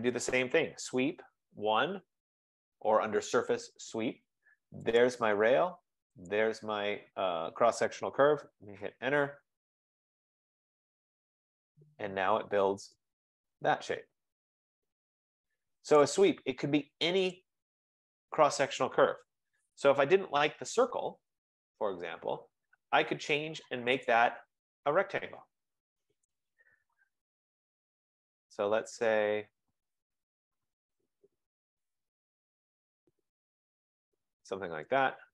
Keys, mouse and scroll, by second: 0.6-3.9 typing, 2.8 scroll, 5.2 click, 6.4 click, 8.6 Return, 9.5 Return, 9.8 scroll, 11.8 click, 16.0 right click, 19.3-20.3 typing, 24.2 click, 26.5 click, 27.4-28.6 scroll, 34.3 click, 35.1 click.